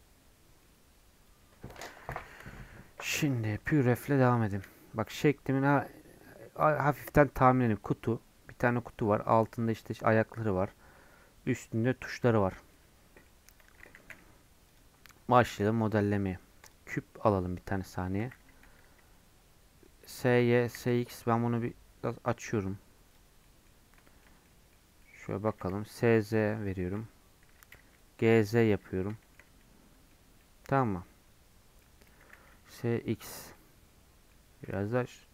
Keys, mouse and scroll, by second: 3.3 middle click, 4.1 scroll down 1, 4.2-7.0 middle drag, 7.0-11.2 scroll down 1, 11.2-12.2 scroll down 1, 12.2 middle click, 12.5-13.3 scroll down 1, 13.3-16.7 middle drag, 16.7 shift+a, 18.2 s, 20.6 s, 23.3 scroll up 4, 23.4-24.8 middle drag, 24.8 scroll up 1, 25.0 middle click, 25.5 s, 26.8 scroll down 1, 26.9 middle click, 27.5 g, 29.2 shift+middle click, 29.5 scroll up 1, 29.6 middle click, 30.1 scroll up 2, 30.4-32.3 middle drag, 32.3 s, 33.5-35.3 middle drag.